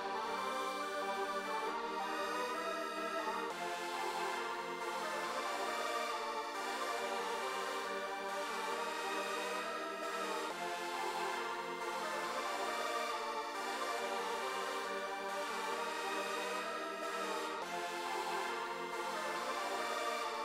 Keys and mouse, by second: 1.0 click, 6.8 click, 7.8 right click, 8.8 right click, 9.8 click, 12.7 right click, 16.3 click, 18.3 click, 20.2 click.